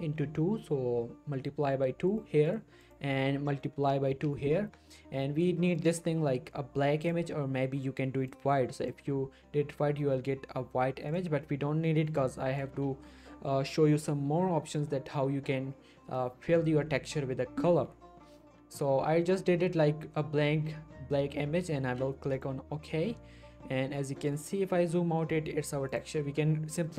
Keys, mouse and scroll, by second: 3.3 click, 5.8-8.9 drag, 22.3 click, 23.0-23.3 scroll down 1, 23.7-24.2 scroll up 1, 24.2 middle click, 25.9 click.